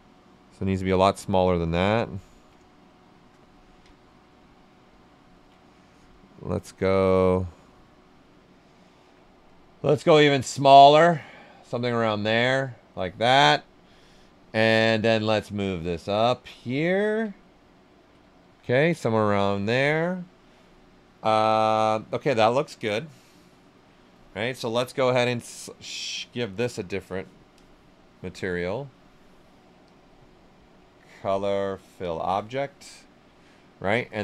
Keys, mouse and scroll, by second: 1.4 click, 2.1 ctrl+right click, 2.4 right click, 3.9-6.4 ctrl+right drag, 6.4 click, 7.2-9.7 alt+right drag, 9.7-12.1 drag, 12.1 click, 13.2 right click, 13.9 alt+right click, 15.0-17.2 drag, 16.4-17.2 typing, 17.3 ctrl+right click, 18.4 q, 24.5 click, 26.7-27.5 typing, 27.5 click, 29.8 click.